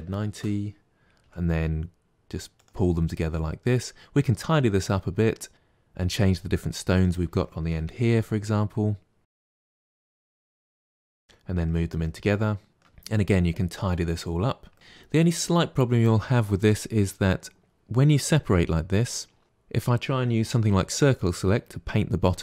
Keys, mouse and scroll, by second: 1.1 g, 2.9-4.6 middle drag, 4.6-5.4 scroll up 1, 5.4 scroll up 1, 6.9 click, 7.7 Delete, 9.3 click, 9.3 Delete, 9.5 click, 9.7 middle click, 10.0 click, 10.1 Delete, 10.5 KP_7, 10.7 shift+middle click, 10.9 g, 11.2-14.1 middle drag, 14.1 scroll up 2, 14.6 middle click, 14.7 ctrl+z, 20.5 c.